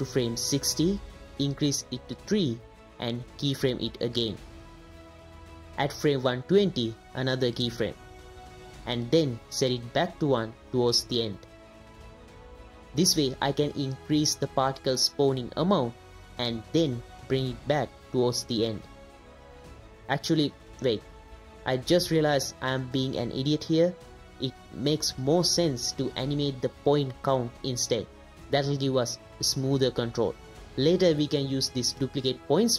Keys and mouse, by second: 2.2 click, 3.8 click, 6.6 click, 8.2 click, 11.2 click, 12.6 click, 13.8 space, 24.8 click, 27.1 space, 28.1-30.1 drag.